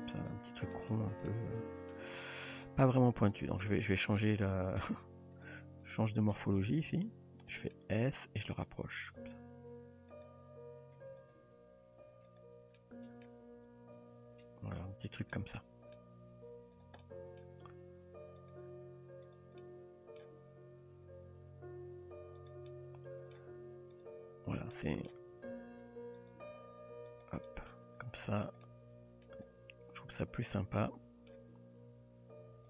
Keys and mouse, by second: 1.3-2.0 middle drag, 2.2 shift+middle drag, 2.9 Tab, 3.5 click, 4.2-4.8 middle drag, 5.9 shift+click, 6.3 shift+drag, 6.9 s, 7.7 middle click, 8.6 g, 10.4 r, 11.4 g, 12.8-13.3 middle drag, 14.0 Tab, 15.3-16.0 middle drag, 16.2 Tab, 16.8 click, 17.0-17.4 middle drag, 19.3 click, 19.6 middle click, 20.4 g, 22.7-23.4 middle drag, 24.8-25.1 middle drag, 25.3 r, 26.4 g, 27.5-27.8 middle drag, 27.8 Tab, 28.7-29.3 middle drag, 29.8 Tab, 30.4 click, 30.8-31.3 middle drag, 31.5 g.